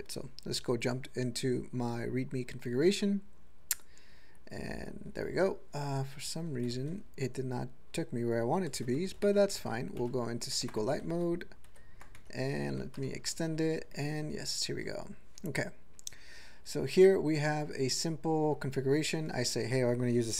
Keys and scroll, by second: 4.5 Return, 8.8 typing, 9.6 Return, 11.8 ctrl+g, 12.4 Tab, 13.2 ctrl+=, 14.2 ctrl+l, 14.8 ctrl+l, 15.6 ctrl+p, 16.3 ctrl+n, 17.2 ctrl+n, 17.6 ctrl+n, 17.6 ctrl+n, 17.7 ctrl+n, 18.0 ctrl+n.